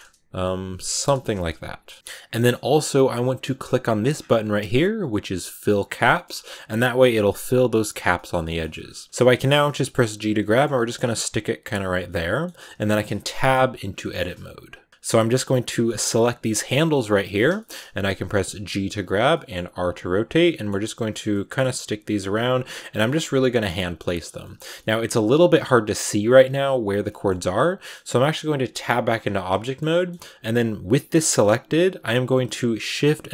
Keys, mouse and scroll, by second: 0.9 BackSpace, 1.8 middle click, 1.9 right click, 2.2-5.6 shift+middle drag, 5.6 click, 6.0 shift+middle click, 6.1-7.8 scroll up 4, 7.8-9.0 scroll down 8, 8.0 middle click, 8.3 shift+middle click, 9.0 scroll up 1, 9.3 shift+middle click, 9.7 g, 10.4 shift+middle click, 11.1 g, 11.9 middle click, 12.6-13.1 scroll up 3, 13.2 Tab, 13.6-13.9 scroll down 4, 13.9-15.9 middle drag, 15.9 right click, 16.5 g, 16.8 middle click, 17.6-18.1 scroll up 2, 17.7 middle click, 18.1 middle click, 18.4 g, 19.2 middle click, 19.6 r, 20.3 middle click, 20.6 g, 21.2 middle click, 21.6 scroll up 1, 21.6 g, 22.2 r, 22.9 middle click, 23.2 g, 23.7 scroll down 4, 23.8 middle click, 24.4 scroll down 4, 24.6 middle click, 25.5-26.1 scroll up 1, 26.1 scroll up 1, 26.2 middle click, 26.9 scroll up 1, 27.1 middle click, 27.4 scroll down 3, 27.7-28.7 middle drag, 28.7 Tab, 28.9-29.5 scroll up 6, 29.5 shift+middle click, 29.7 scroll up 1, 29.8 middle click, 30.7 g.